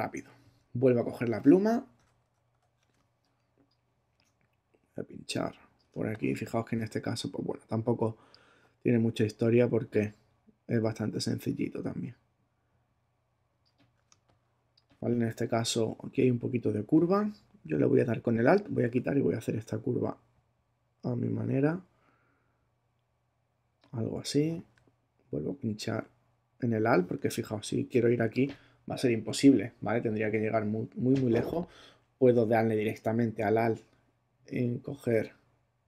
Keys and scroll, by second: 2.9 super+space, 5.9 space, 14.1 space.